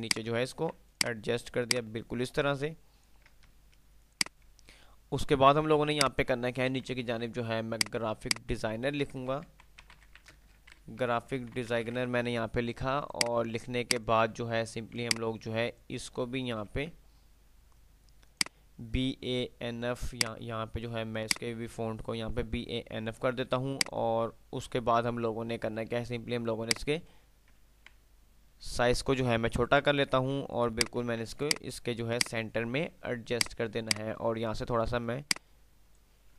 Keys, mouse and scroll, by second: 0.8 c, 1.1 click, 2.8 click, 3.6 ctrl+F3, 4.4 ctrl+click, 4.6 ctrl+F2, 5.8 ctrl+click, 6.1-6.6 ctrl+F2, 7.9 ctrl+click, 8.8 ctrl+shift+g, 9.4 ctrl+a, 9.8 ctrl+p, 10.4 ctrl+i, 10.4 ctrl+c, 10.4 ctrl+space, 10.8 ctrl+d, 10.8 ctrl+e, 11.6 ctrl+s, 11.8 ctrl+i, 11.9 ctrl+e, 12.3 ctrl+r, 13.3 ctrl+click, 13.4 ctrl+F2, 13.9 ctrl+click, 14.3 ctrl+F2, 15.1 ctrl+click, 16.8 ctrl+b, 18.4 ctrl+click, 22.9 ctrl+F3, 22.9 ctrl+F2, 25.1 ctrl+F3, 26.8-27.6 ctrl+drag, 28.3 ctrl+r, 28.9 ctrl+r, 30.4 shift+click, 30.9 shift+click, 31.1 c, 31.6 F2, 31.6 click, 33.8-36.3 drag, 35.6-36.3 ctrl+click.